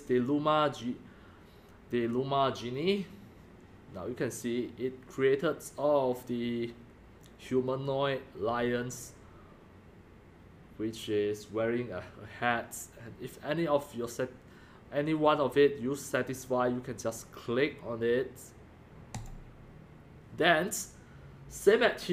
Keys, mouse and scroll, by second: 1.0 drag, 1.4-5.0 drag, 19.3 click.